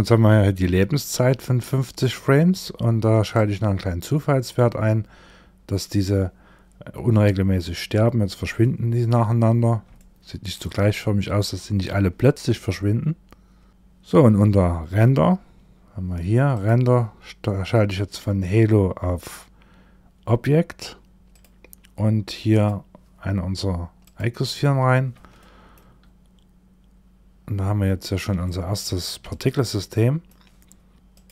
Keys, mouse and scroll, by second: 2.8 click, 8.0 shift+middle click, 8.8 scroll down 2, 9.4 shift+middle click, 13.7-14.3 scroll down 1, 14.3-15.0 scroll down 8, 15.1-15.5 scroll down 2, 16.0 click, 16.3-17.5 scroll down 1, 17.5 click, 17.5-21.3 scroll down 1, 21.3-21.7 scroll down 2, 22.0 click, 24.8 shift+middle click, 30.9 click.